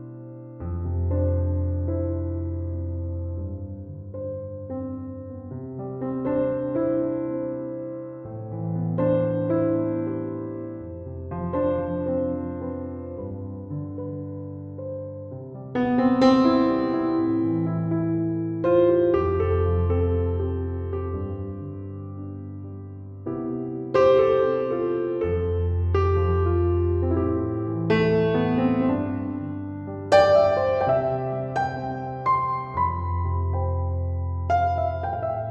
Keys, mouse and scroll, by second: 0.1 ctrl+7.